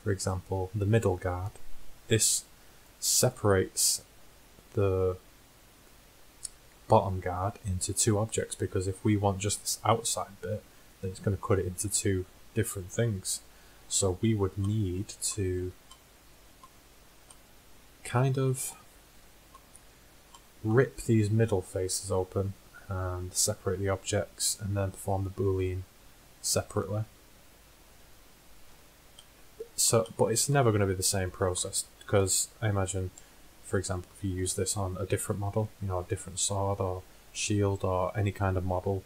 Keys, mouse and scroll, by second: 0.4-2.2 drag, 2.2 z, 14.0 middle click, 23.0-29.4 middle drag, 28.7 z.